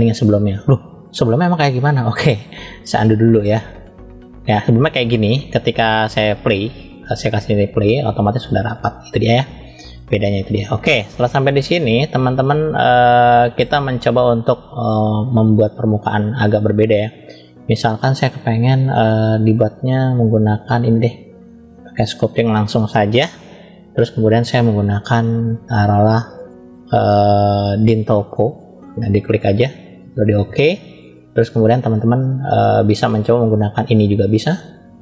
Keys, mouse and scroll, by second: 1.9-2.5 drag, 2.9 click, 6.4-7.8 drag, 11.1 click, 11.6 click, 12.6-15.5 middle drag, 20.6-22.1 drag, 27.6 click, 29.2-30.3 drag, 31.7-32.9 middle drag, 34.1 click, 34.9-35.0 middle drag.